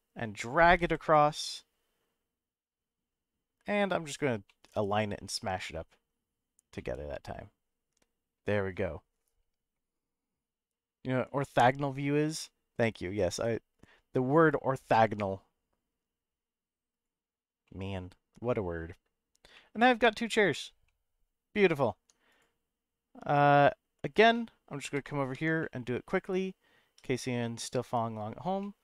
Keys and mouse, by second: 0.8 y, 4.1 click, 4.5 middle click, 6.7-8.4 middle drag, 11.4 middle click, 12.5 middle click, 14.5-17.0 right drag, 17.6-18.8 middle drag, 19.5 middle click, 20.4 click, 20.8 middle click, 21.9 Tab, 22.3 click, 24.3-24.9 middle drag, 25.3 Tab, 25.6 middle click, 26.9 3, 27.7 click, 28.6 middle click.